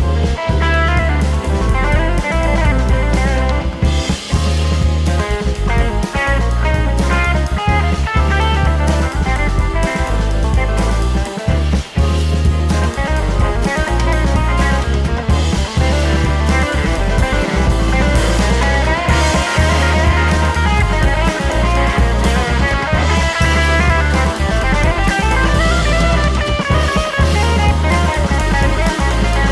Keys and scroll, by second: 10.8 super+z.